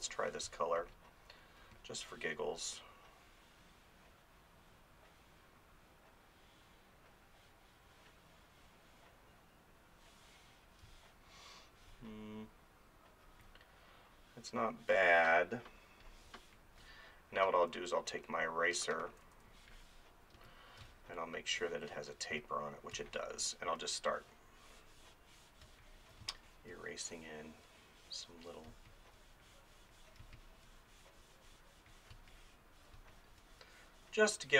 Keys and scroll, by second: 0.4 space, 10.9 space, 16.3 space, 17.7 ctrl+=, 18.1 ctrl+-, 20.4 ctrl+z, 20.8 space, 22.9 space, 25.7 space, 28.7 space, 32.1 space.